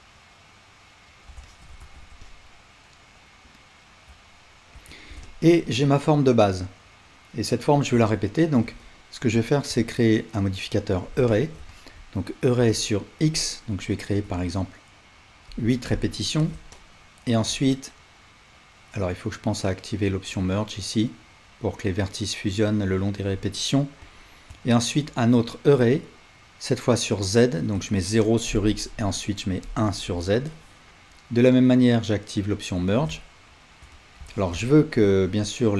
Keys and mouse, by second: 1.8 alt+z, 4.7 Tab, 24.0-35.7 drag, 29.0 Tab.